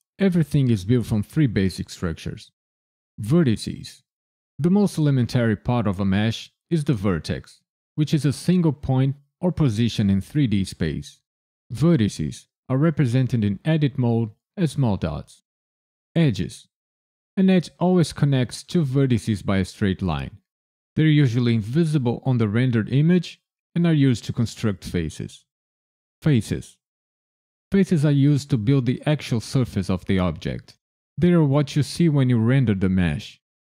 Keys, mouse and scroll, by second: 3.0 click, 14.9 2, 16.0 click, 25.2 3, 26.1 click.